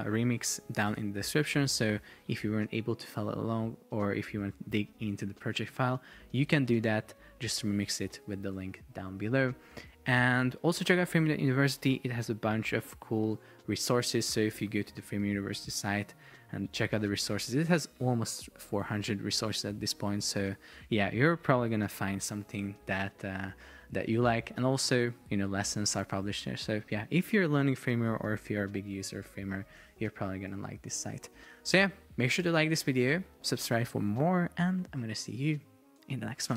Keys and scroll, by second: 12.6 alt+f, 12.9 super+p, 13.6 super+p, 15.0 super+o.